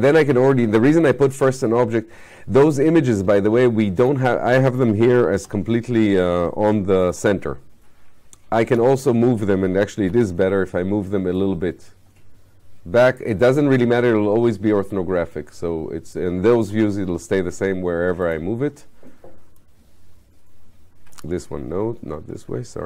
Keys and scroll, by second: 5.4 f, 21.9 ctrl+y.